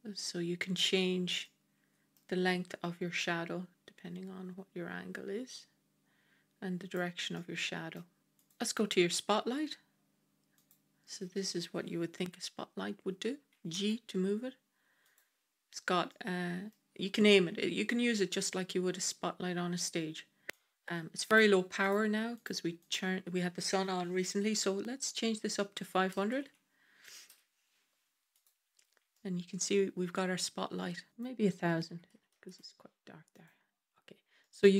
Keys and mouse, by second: 1.3-2.0 middle drag, 3.0-6.8 drag, 7.2-7.8 middle drag, 8.2 click, 13.6 g, 16.0-16.6 middle drag, 20.4-22.2 drag, 22.8-28.2 drag, 26.2 KP_0, 26.3 KP_0, 29.0-30.3 middle drag, 31.1-33.2 drag, 32.2 KP_0, 34.3 middle drag.